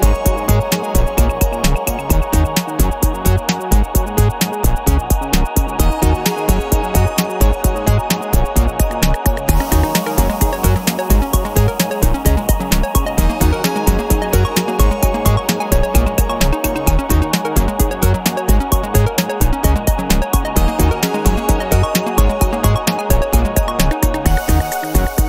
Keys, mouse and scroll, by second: 0.7 middle click, 2.0-5.2 drag, 5.8-8.2 drag, 8.8 click, 9.5-14.4 middle drag, 14.6-16.2 middle drag, 16.6-17.0 scroll up 2, 17.2-17.6 scroll down 2, 17.8-18.9 middle drag, 19.8 click, 20.2 space, 20.6 click, 21.4-23.8 middle drag, 24.0 o.